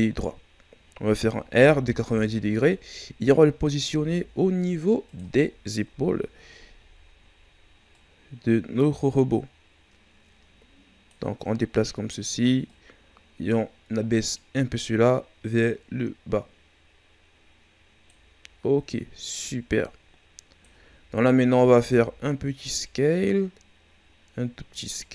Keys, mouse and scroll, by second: 0.5 scroll up 2, 1.5 r, 3.8 s, 5.9 KP_3, 7.9-10.9 drag, 12.6-21.7 drag, 21.7 s.